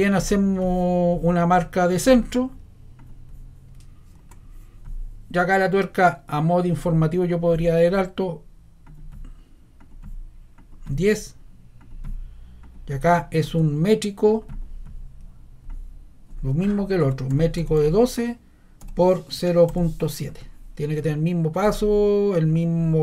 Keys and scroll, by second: 17.0-20.2 typing.